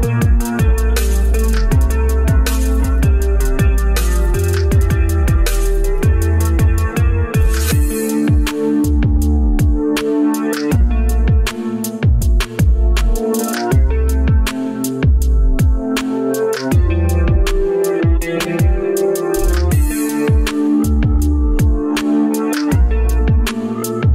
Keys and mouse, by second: 2.1 click, 3.3 click, 5.1 Tab, 6.1 3, 6.6 click, 7.3 shift+click, 9.8 shift+click, 13.3 shift+click, 13.9-15.3 shift+drag, 15.6 shift+click, 16.0 shift+click, 16.9 shift+click, 17.4 shift+click, 18.5 shift+click, 19.0-20.5 shift+drag, 22.3-24.1 middle drag.